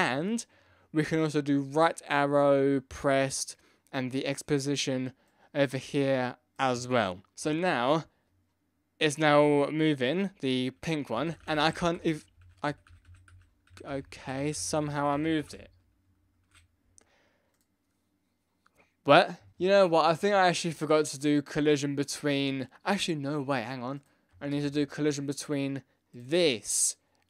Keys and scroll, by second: 11.1 Left, 11.2 Right, 11.4 Down, 11.6 Up, 11.6 Down, 11.7 Left, 11.7 Down, 12.4 Left, 12.7 Up, 12.7 Down, 12.7 Right, 12.9 Left, 13.0 Down, 13.1 Right, 13.3 Left, 13.6 Up, 13.7 Right, 14.0 Left, 14.0 Down, 14.0 Right, 14.2 Left, 14.4 Up, 14.4 Right, 14.5 Left, 14.6 Down, 14.8 Right, 14.9 Up, 15.0 Right, 15.1 Left, 15.2 Down, 15.5 Down, 15.8 Right, 16.3 Left, 24.5 ctrl+c, 24.6 ctrl+v.